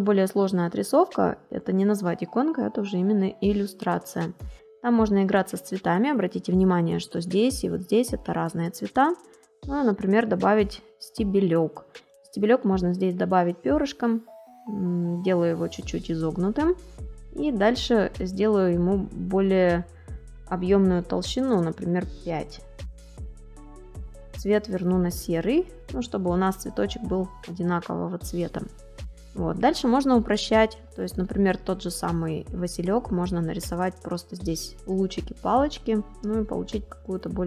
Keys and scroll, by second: 1.1 space, 7.1 space, 11.3 space, 27.5 space, 30.1 space, 36.4 space.